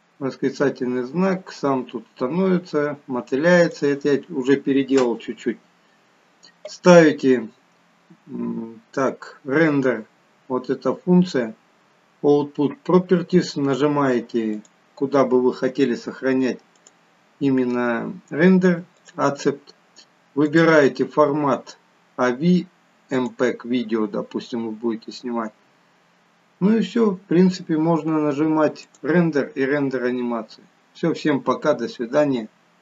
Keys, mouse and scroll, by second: 14.5 click, 20.4 click, 25.6 scroll down 3, 28.9 click.